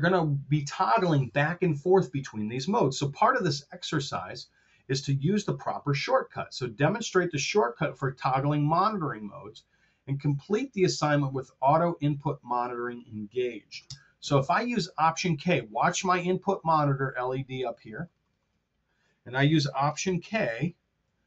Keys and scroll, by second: 3.3 super+Tab, 13.9 super+Tab, 20.4 alt+k.